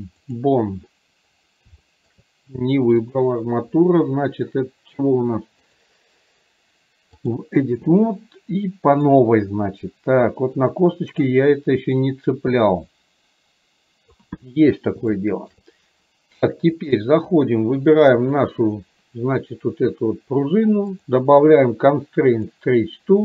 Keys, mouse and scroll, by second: 1.9 shift+middle click, 3.2 click, 5.8-7.4 drag, 9.3-14.2 drag, 15.2 shift+middle click, 17.1 click, 18.3 click, 21.1-22.7 drag.